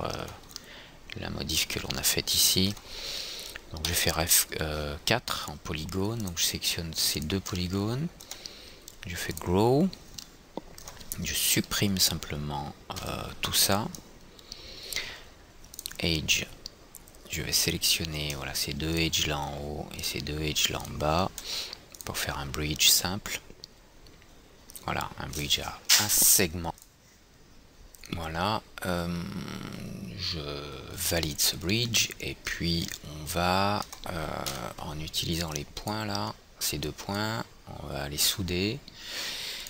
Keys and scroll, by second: 4.2 i, 4.9 i, 7.4 ', 13.3 Delete, 34.9 &, 35.5 &.